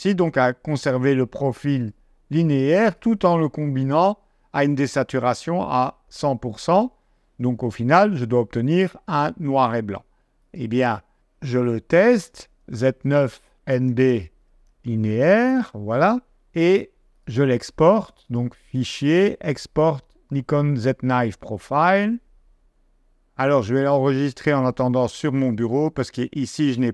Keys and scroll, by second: 11.1 shift+z, 12.0 shift+ç, 12.4 space, 13.7-15.8 typing.